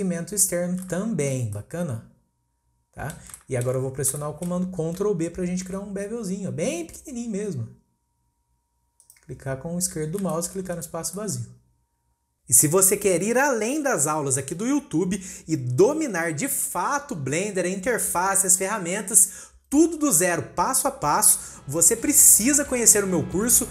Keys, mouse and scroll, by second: 3.1 scroll up 1, 3.3-5.5 shift+middle drag, 5.5 ctrl+b, 9.8-10.3 scroll down 1, 10.3 scroll down 1, 10.3 shift+middle click, 10.7 click, 11.1-14.2 middle drag, 15.6-16.0 scroll down 1, 16.0-17.5 shift+middle drag, 17.5-17.9 scroll up 1, 17.9-19.6 shift+middle drag, 19.6 scroll down 1, 19.8-23.7 middle drag.